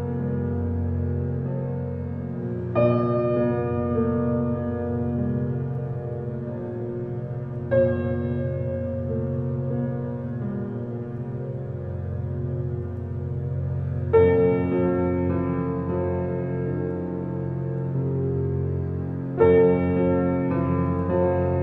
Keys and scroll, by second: 4.0 ctrl+g, 6.2 shift+j, 8.3 shift+e, 8.6 shift+l, 9.8-11.7 typing.